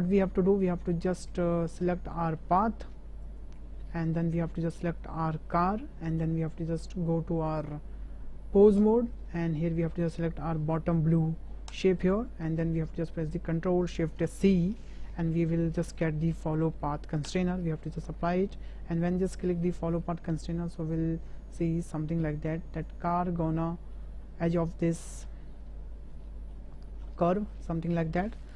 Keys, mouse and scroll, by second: 0.2-0.6 drag, 1.2 shift+drag, 1.5 drag, 2.2 shift+drag, 3.2 click, 4.4-4.8 shift+drag, 5.6 shift+click, 7.5-8.9 drag, 14.4 ctrl+shift+c, 19.2 shift+drag, 20.5 shift+click, 21.3 shift+middle click, 21.5 shift+drag, 21.7 middle click, 22.4 shift+b, 23.6-23.9 shift+middle drag, 24.6 shift+b, 25.6-26.5 middle drag, 27.1 shift+middle drag, 27.5-28.2 middle drag.